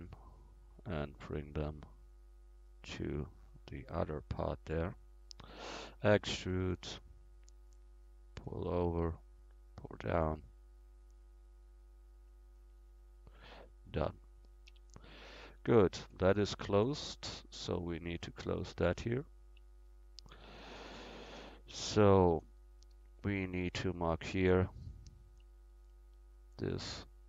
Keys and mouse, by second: 5.9 e, 7.0-8.5 drag, 8.9 click, 14.0 Tab, 14.7 Tab, 15.7 a, 18.9 right click, 20.4 Tab, 20.9 Tab, 21.3 a, 21.7 a, 22.6-24.4 middle drag.